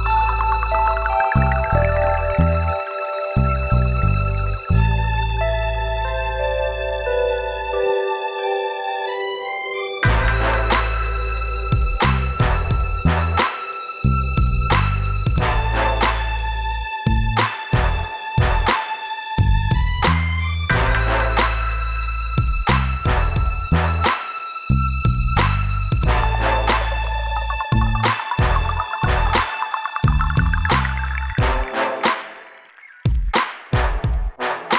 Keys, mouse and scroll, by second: 2.6 middle click, 4.1 click, 4.3 click, 5.0 click, 7.1 scroll down 2, 7.1 b, 10.0 shift+Return, 11.0 click, 11.9 click, 12.1 click, 12.7 scroll up 1, 13.9 click, 18.7 click, 18.8 click, 20.4 scroll up 1, 22.1 click, 22.8 click, 22.9 click, 23.9 scroll up 2, 25.1 click, 25.2 click, 27.5 click, 27.5 click, 33.0 click, 33.2 click, 33.3 click.